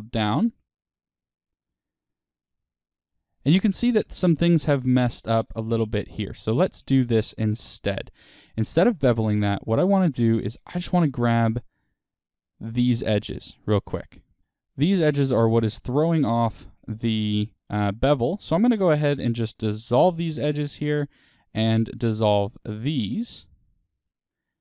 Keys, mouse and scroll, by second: 1.6-6.7 middle drag, 3.9-6.2 scroll, 6.7 ctrl+z, 8.9-11.3 middle drag, 10.5 alt+click, 11.3 click, 12.5 ctrl+click, 13.2-14.4 middle drag, 14.4 ctrl+click, 16.5-17.6 ctrl+drag, 17.6-20.0 middle drag, 20.0 x, 21.0-22.1 drag, 22.1-23.3 middle drag, 23.3 shift+click.